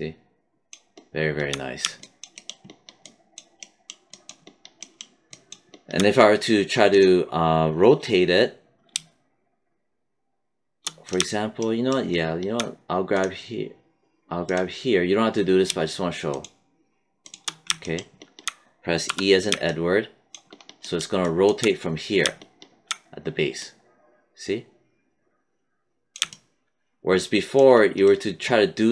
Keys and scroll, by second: 18.9 e.